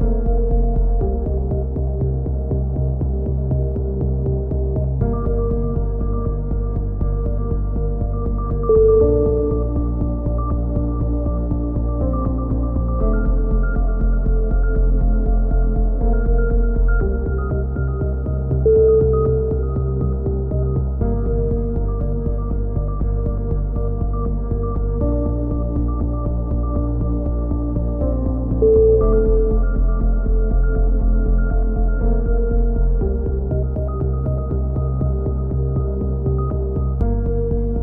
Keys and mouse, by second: 1.2 e, 2.7 click, 3.0 KP_3, 3.5 click, 4.1 right click, 4.3 click, 5.2 right click, 5.6 click, 6.3 click, 6.8-8.7 drag, 8.7 e, 9.2-10.2 right drag, 9.4 KP_7, 11.1 click, 11.4 a, 11.6 KP_3, 12.4 right click, 12.9 e, 13.9 s, 14.7 click, 16.1 e, 16.4 click, 17.3 a, 18.4 f, 18.5 a, 19.4 click, 19.4 right click, 19.8 a, 20.3 a, 22.4 right click, 22.4 f, 22.5 a, 23.0 click, 24.0-25.0 right drag, 26.3 a, 26.6-28.2 right drag, 28.0 f, 28.1 a, 28.2 z, 28.8 middle click, 29.2 right click, 29.7-33.9 typing, 30.2 ctrl+r, 30.4 click, 30.7-32.4 right drag, 33.4 ctrl+n, 33.9 Tab, 34.5 Tab, 34.6 click, 34.9 right click, 35.7 Tab, 35.8 a, 36.0 a, 36.3 z, 36.4 click, 37.2 KP_7.